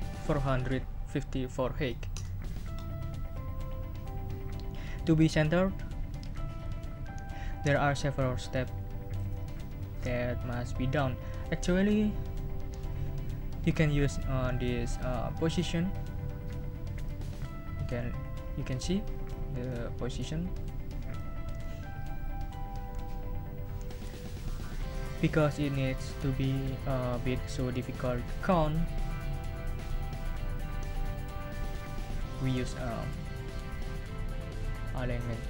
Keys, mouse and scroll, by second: 2.1 Return, 17.0 click, 19.3 click, 21.1 click.